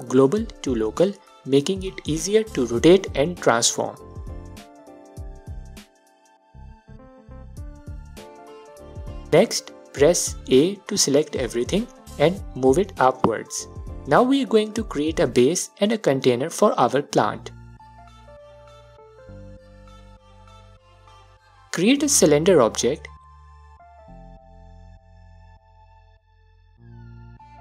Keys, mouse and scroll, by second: 0.3-0.8 middle drag, 0.8 click, 2.0 alt+click, 4.4-7.5 drag, 7.7-14.1 alt+drag, 10.8 a, 13.9 scroll down 1, 14.1-14.6 middle drag, 14.6-17.1 alt+drag, 17.4-19.8 alt+drag, 20.3-27.6 alt+drag, 26.1 shift+a.